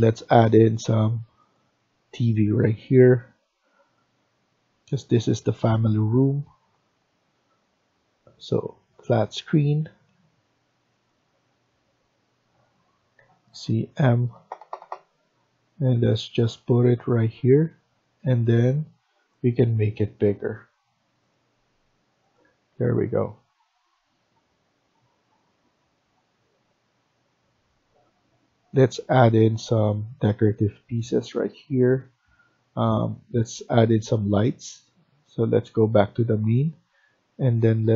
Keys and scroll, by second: 13.0-13.4 typing, 17.4 Escape, 17.5 Escape, 22.4 Escape, 22.7 Escape.